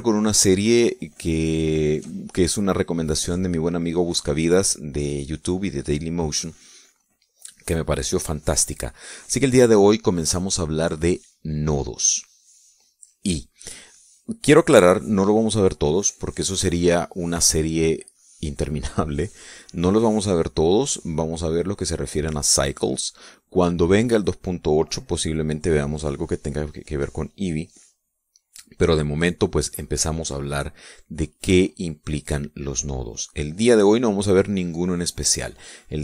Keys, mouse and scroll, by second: 0.9 shift+click.